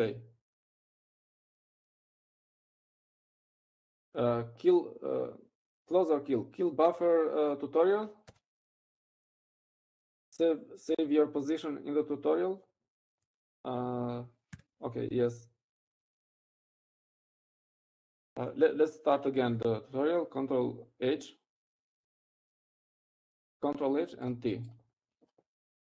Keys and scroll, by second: 3.1 ctrl+x.